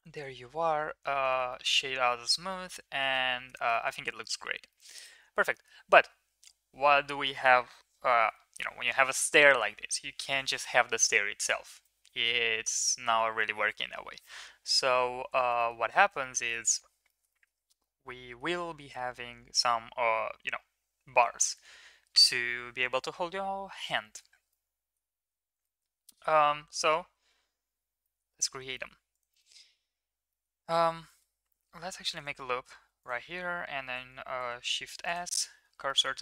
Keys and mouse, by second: 0.4 middle click, 0.7 ctrl+s, 1.3 shift+middle click, 1.5 middle click, 2.4-3.1 middle drag, 3.5 middle click, 4.6 middle click, 5.5 middle click, 9.4 middle drag, 15.3 shift+middle click, 15.6 middle click, 16.1 shift+middle drag, 16.4 middle drag, 17.0 shift+middle click, 17.3 middle click, 17.8-18.4 middle drag, 24.4-24.9 middle drag, 25.6 middle click, 26.7 middle click, 27.2 shift+a, 28.0 middle drag, 28.7 shift+middle click, 29.1 click, 29.4 middle click, 29.6 Tab, 30.3 middle click, 31.0 middle drag, 31.9 ctrl+r, 32.8 1, 33.8 ctrl+s, 34.5 shift+s, 35.3 Tab, 35.8 middle drag.